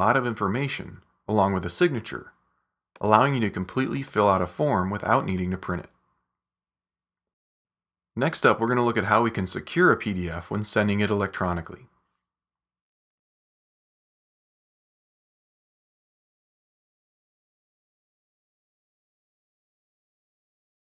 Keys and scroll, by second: 7.9 super+-.